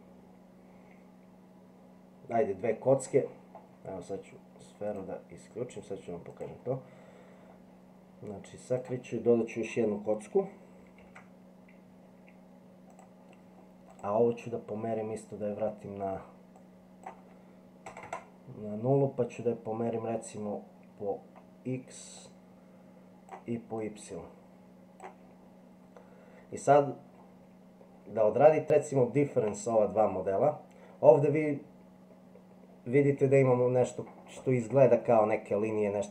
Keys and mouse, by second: 6.3 click, 8.8 click, 11.0 shift+a, 16.7-19.2 drag, 22.3-23.3 drag, 23.9-25.0 drag, 28.4-29.5 middle drag.